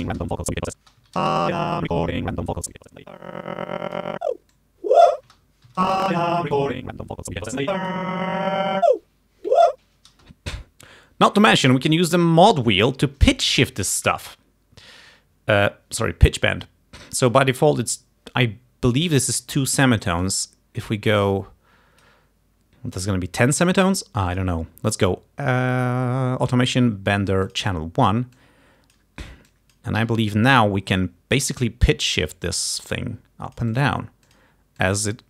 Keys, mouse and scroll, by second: 0.1 space, 0.8 space, 1.0 Home, 1.3 space, 2.8-4.2 drag, 4.6 click, 5.3 space, 5.7 Home, 5.9 space, 6.6-8.2 drag, 10.2 space, 20.3-22.3 drag, 24.4 click, 27.5 click, 28.5 click, 29.6 click, 30.2 d, 30.3 click, 32.7-34.1 drag, 34.4 click, 34.9-35.2 drag.